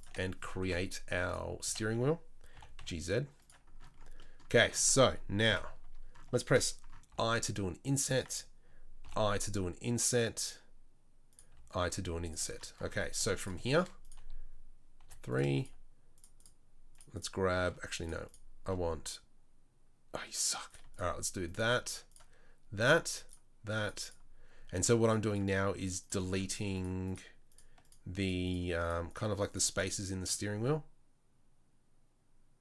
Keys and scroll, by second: 0.6 Delete, 1.6 a, 2.5 g, 5.5 KP_7, 7.1 i, 9.0 i, 11.5 i, 13.2 4, 15.0 3.